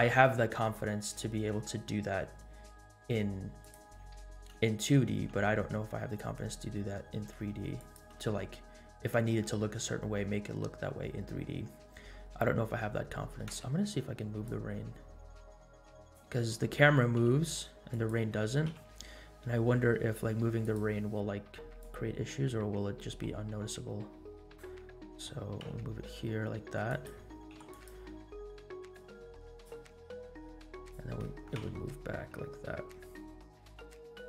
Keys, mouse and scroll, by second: 0.6 space, 1.6 space, 2.4 scroll down 1, 3.6-4.0 drag, 7.9 g, 8.3 space, 13.6 space, 14.5-16.6 drag, 18.0 g, 18.8 i, 22.0-25.0 drag, 25.5 g, 27.0 g, 27.5 i, 28.9 click, 29.2-29.8 drag, 30.6-31.0 drag, 31.6 shift+d.